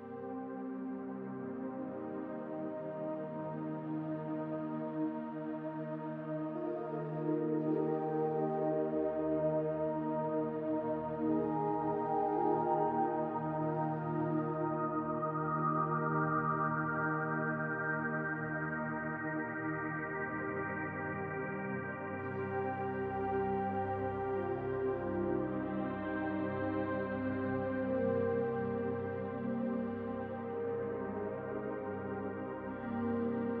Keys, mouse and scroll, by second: 1.1-3.0 drag, 3.0-4.3 shift+middle drag, 4.3-8.2 drag, 8.1 scroll down 2, 8.2-10.0 middle drag, 9.0-10.0 scroll up 2, 10.0-12.6 drag, 12.6-13.6 middle drag, 13.6-16.7 drag, 16.2 ctrl+z, 16.7-18.0 shift+middle drag, 17.0-17.5 scroll up 2, 17.5-18.0 scroll up 1, 18.0-22.9 drag, 22.9-24.1 middle drag, 24.1-26.1 drag, 26.1-27.3 middle drag, 27.3-29.9 drag, 29.9-31.4 middle drag, 30.2 scroll down 2, 30.8-31.4 scroll up 2, 31.4 click, 31.6 scroll up 2, 31.8-33.6 shift+middle drag, 32.2 f.